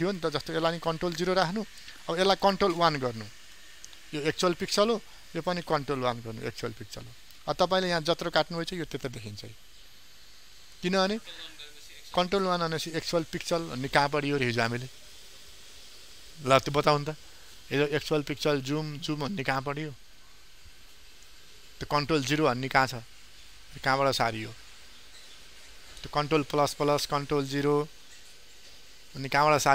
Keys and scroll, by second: 0.8 ctrl+0.